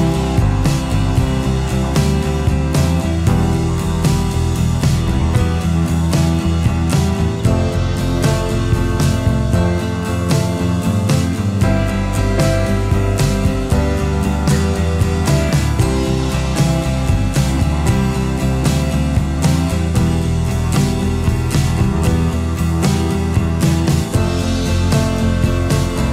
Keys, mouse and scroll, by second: 2.8 space, 5.7 alt+scroll down 1, 5.9 space, 6.6-7.9 alt+scroll up 1, 11.2 space, 25.8 alt+shift+click.